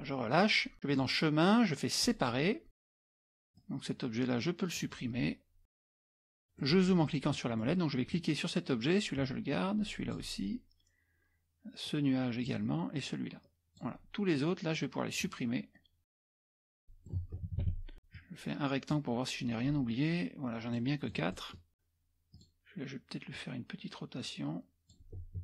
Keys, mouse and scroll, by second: 0.9 click, 2.0 click, 3.0 click, 3.6-5.1 drag, 5.9 click, 6.6 middle click, 6.6-7.4 scroll up 1, 7.4-7.8 scroll down 1, 8.1 click, 9.5 click, 11.9 click, 13.0-14.3 drag, 15.2 click, 16.4 click, 16.8 middle click, 17.5 KP_Subtract, 17.8 KP_Subtract, 18.2-19.4 drag, 20.8 middle click, 20.8 scroll up 1, 21.7 click, 22.3 click, 23.4-25.3 drag.